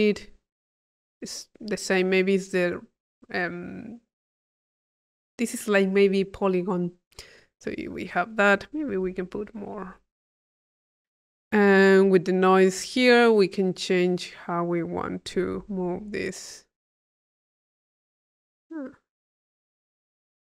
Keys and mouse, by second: 2.6 click, 4.6 click, 8.1 click, 9.2 click, 10.9 click, 12.5 click, 13.6-15.7 drag, 16.3-20.4 drag.